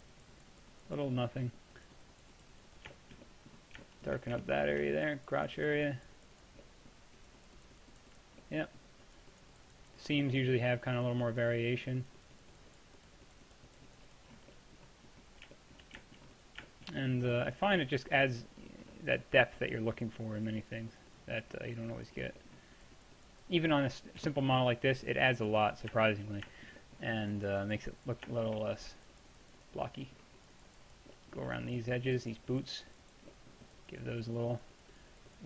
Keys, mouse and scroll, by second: 1.2-4.5 middle drag, 5.0-16.1 middle drag, 16.4-20.9 middle drag, 21.4-35.3 middle drag.